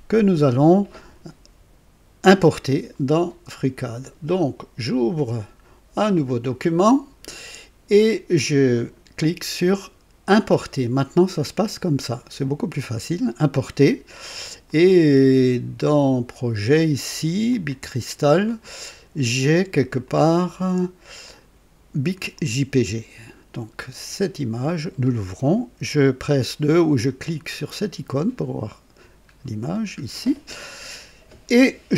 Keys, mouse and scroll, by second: 6.1 click, 8.7 click, 12.7 click, 14.6 click, 15.8 click, 17.5 click, 20.0-21.7 drag, 22.3 click, 23.9 click, 27.6 click, 28.7-29.0 scroll up 2, 29.4 scroll down 2.